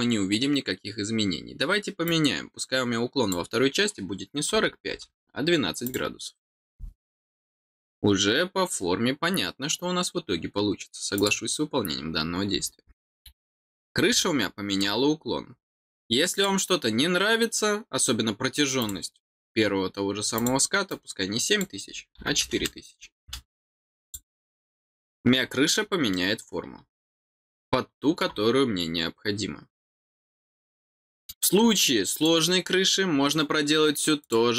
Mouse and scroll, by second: 12.5-13.0 scroll, 14.1 middle click, 16.3 click, 18.7 click, 20.3 click, 20.8 click, 24.0 click, 26.0-28.1 middle drag, 30.3 scroll down 2, 30.8 middle click, 31.5 scroll up 1, 32.1 click, 34.1 click.